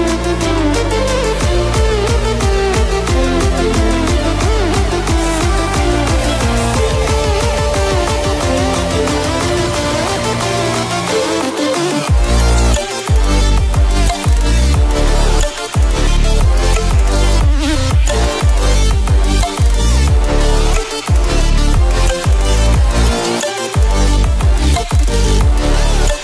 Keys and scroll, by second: 14.9 ctrl+t.